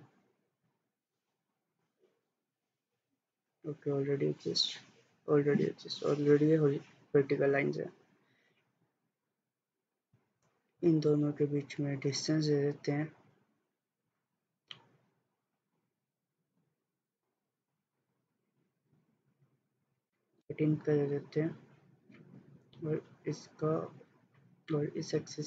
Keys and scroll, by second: 19.8-20.7 typing.